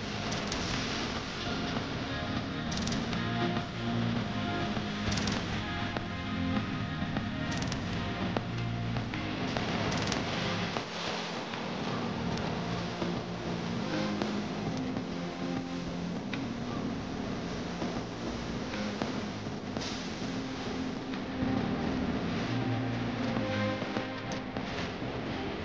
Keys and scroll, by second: 6.4 shift+F2, 6.8 F3, 21.4 F3, 22.0 Escape, 22.4 F3, 22.7 Escape.